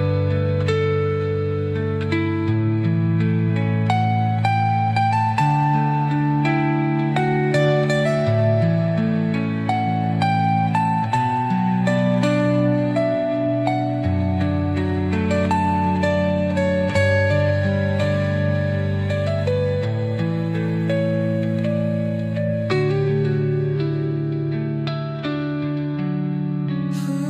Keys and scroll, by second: 23.1 space.